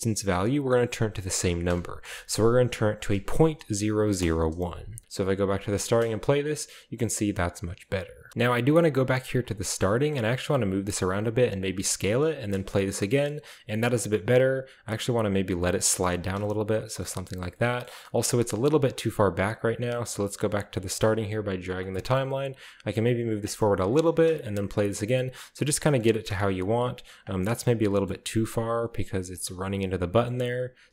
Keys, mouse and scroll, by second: 0.6 click, 1.1 click, 1.7-3.7 typing, 4.2 Return, 5.2 drag, 5.7-6.5 scroll down 2, 5.8 space, 7.8-8.1 middle drag, 8.3 middle click, 8.3-9.0 scroll up 1, 8.3 b, 9.0-9.4 drag, 9.6-10.3 shift+middle drag, 10.4-12.6 typing, 10.6 click, 11.3 click, 11.6 click, 11.9-12.8 scroll up 1, 12.6 middle click, 13.1-14.8 middle drag, 13.3-14.4 scroll up 1, 16.2 space, 16.4-17.0 scroll down 2, 17.0-19.0 shift+middle drag, 18.1-19.0 scroll up 1, 19.4 drag, 19.7 click, 20.0-20.4 drag, 21.0-21.8 drag, 22.5 g, 23.3-23.9 drag, 24.1 space, 24.2 click, 25.1-25.9 middle drag, 25.7-26.5 scroll up 1, 26.2 g, 26.6-27.2 drag, 28.3-30.8 typing, 28.7-29.6 drag, 30.4-30.9 middle drag.